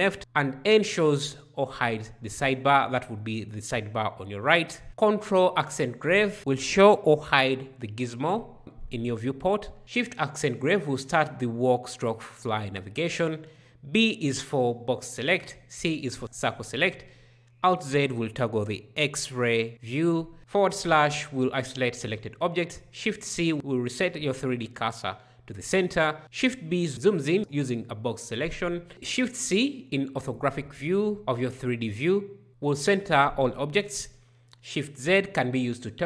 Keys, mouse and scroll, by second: 0.3 n, 4.9 ctrl+`, 9.8 shift+`, 13.7 b, 16.2 c, 17.7 alt+z, 20.4 /, 23.0 shift+c, 26.2 shift+b, 28.7 shift+c, 34.4 shift+z.